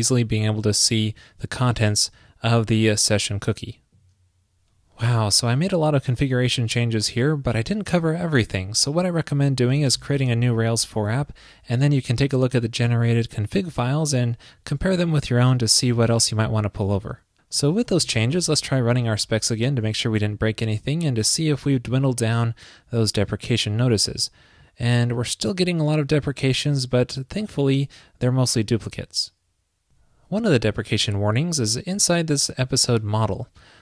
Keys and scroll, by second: 14.8 alt+BackSpace, 15.0 alt+BackSpace.